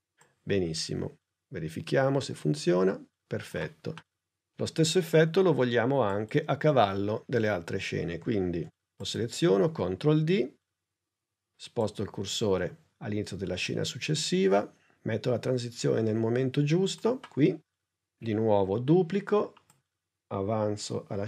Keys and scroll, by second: 9.6 super+d, 18.7 super+d.